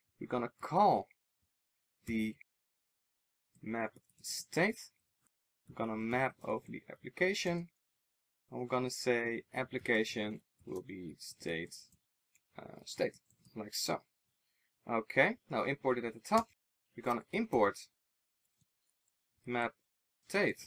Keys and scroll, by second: 14.1 super+z, 18.1 alt+super+l.